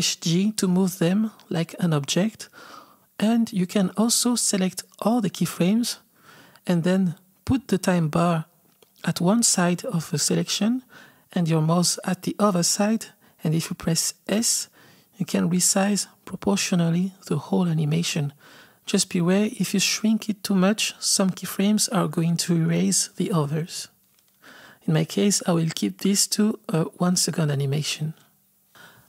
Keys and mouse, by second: 0.1 g, 3.1 click, 7.1-14.3 drag, 14.3 s, 28.9 click.